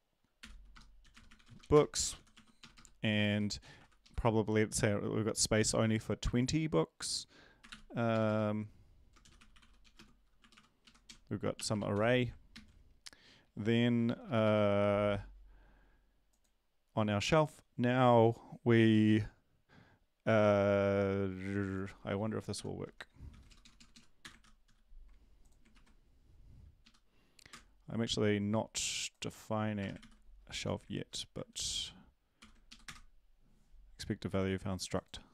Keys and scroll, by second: 0.4-4.1 typing, 7.6 typing, 9.0-12.4 typing, 12.5 ctrl+s, 13.4 Down, 22.5 shift+Home, 23.3 ctrl+c, 23.5 Down, 23.6 Down, 23.7 Down, 24.2 Return, 24.4 ctrl+v, 24.6 ctrl+s, 26.8 Up, 27.5 Return, 29.8 BackSpace, 30.0 ctrl+s, 32.4 ctrl+l, 32.7 Up, 32.8 Return.